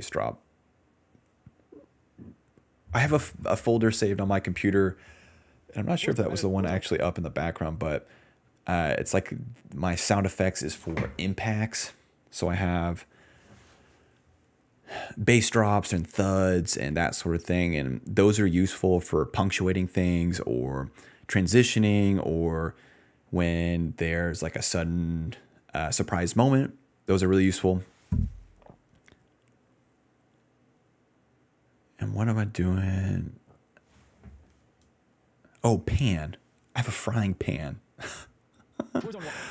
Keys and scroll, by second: 5.9 space, 6.7 space, 30.7-31.6 typing, 38.1-39.5 typing.